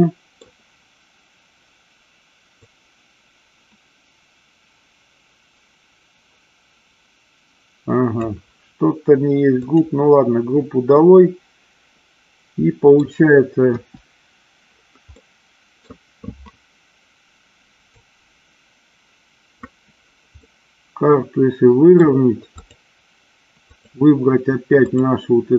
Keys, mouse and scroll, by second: 2.7-8.4 drag, 9.7 click, 11.1-13.1 middle drag, 13.9 KP_1, 15.3 middle click, 18.1-19.6 drag, 20.5-22.1 middle drag, 22.6 click, 23.7 click.